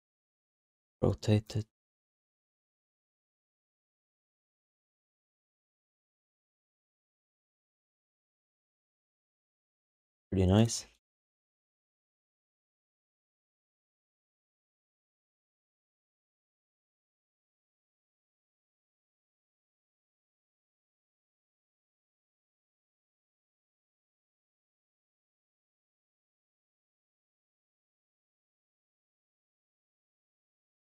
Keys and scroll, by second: 8.9 q, 20.2 alt+shift+d, 20.5 ctrl+s, 25.4 1.